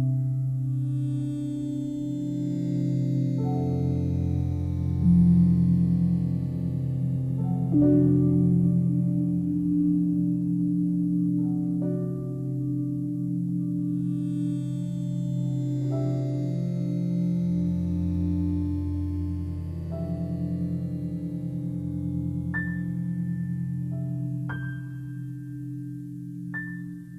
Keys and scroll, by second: 8.6 ctrl+g, 10.8 shift+b, 11.2 e, 11.8 Return.